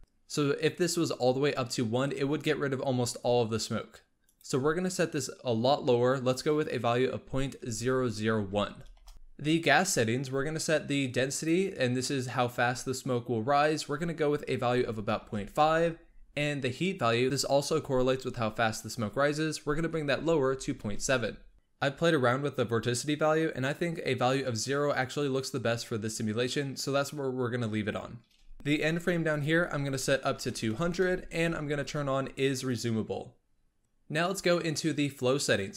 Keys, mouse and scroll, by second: 4.1-7.3 drag, 9.1-11.3 scroll down 3, 11.3-14.4 drag, 18.7-21.5 drag, 29.2-30.6 drag, 30.6 KP_0, 32.5 click.